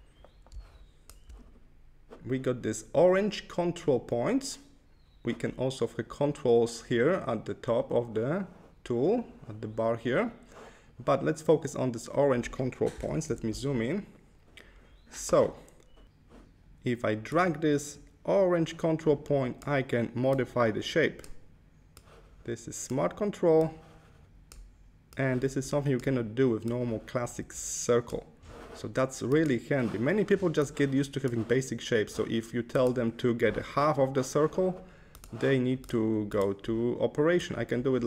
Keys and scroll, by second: 13.1 super+=.